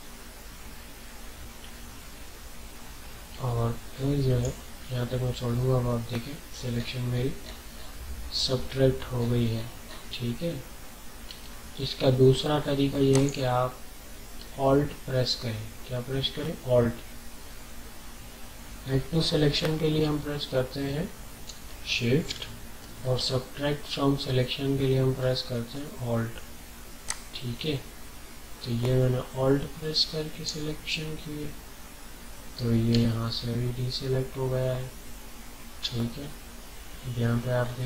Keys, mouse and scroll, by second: 5.4 alt+scroll down 1, 6.7 scroll up 1, 9.1-10.2 alt+scroll up 4, 11.6-12.3 alt+scroll down 3, 13.1 click, 17.9 alt+scroll down 1, 18.7 alt+scroll down 1, 19.1 ctrl+scroll up 1, 20.1 alt+scroll up 1, 20.7 alt+scroll up 1, 21.6-23.7 ctrl+scroll up 6, 23.1 typing, 27.0-33.1 alt+drag, 33.1-34.8 alt+scroll down 3, 34.8 typing, 37.5 scroll up 1.